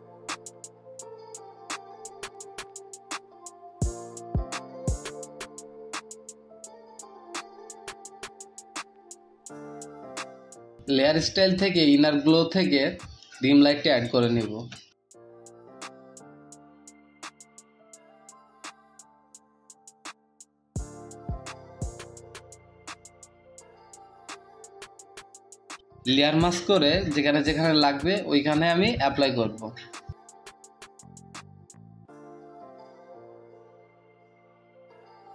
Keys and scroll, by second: 3.9 ctrl+z, 5.0 ctrl+z, 9.3 space, 32.1 typing, 33.7 [, 33.9 ], 34.6 space, 35.2 space.